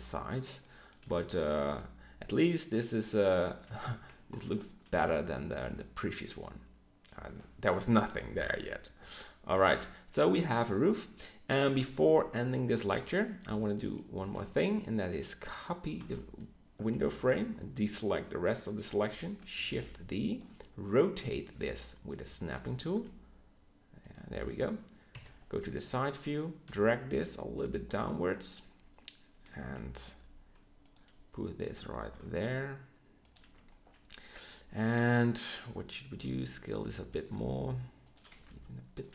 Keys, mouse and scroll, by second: 0.9 a, 9.7 KP_1, 14.2 b, 16.0 z, 16.7 b, 19.0 KP_7, 19.7 shift+d, 22.8 r, 25.0 KP_3, 26.6 g, 31.5 g, 32.0 g, 36.0 s, 37.1 g, 38.3 s.